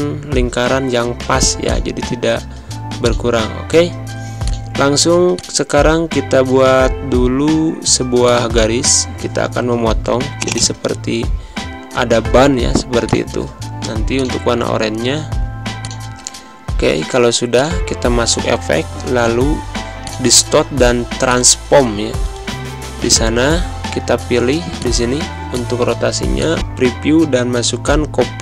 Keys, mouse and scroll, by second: 1.2 z, 1.5 click, 2.7 space, 2.9 click, 3.1 space, 4.3-8.1 drag, 10.3 click, 12.2 d, 13.0 click, 15.9 click, 22.9 click, 24.7 click.